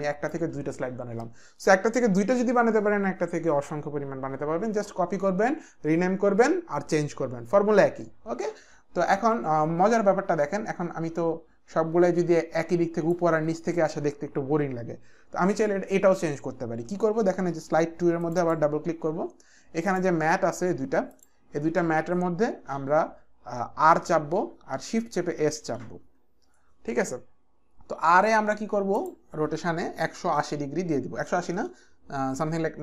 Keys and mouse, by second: 10.0 click, 18.3 click, 19.9 click, 21.1 ctrl+click, 24.0 r, 25.5-26.2 typing, 29.0 click, 30.4 KP_1, 30.6 KP_8, 31.3 BackSpace, 31.5 BackSpace.